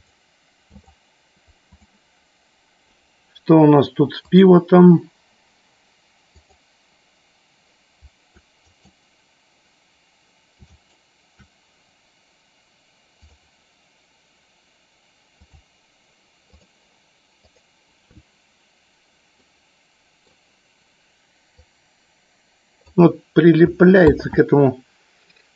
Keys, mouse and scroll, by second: 0.8-1.8 right drag, 4.4 click, 6.3 click, 8.7-10.5 right drag, 10.8 shift+right click, 13.3-15.8 drag, 19.4-20.3 middle drag, 21.6-23.0 drag, 24.3 ctrl+z.